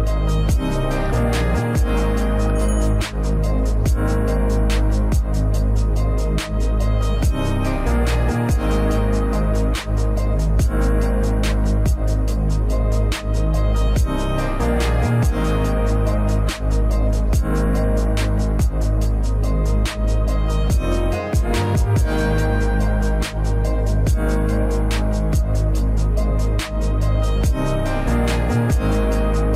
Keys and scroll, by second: 0.5 s, 1.2 s, 7.9 s, 10.9 s, 12.3 b, 15.9 a, 18.8 a, 24.5 s, 26.4 a, 26.7 s.